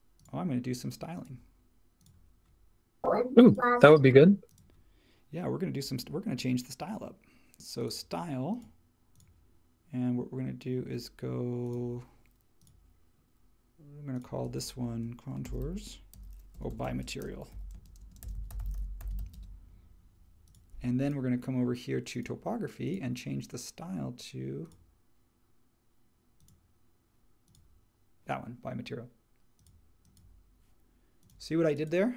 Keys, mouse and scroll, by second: 15.1-19.8 typing.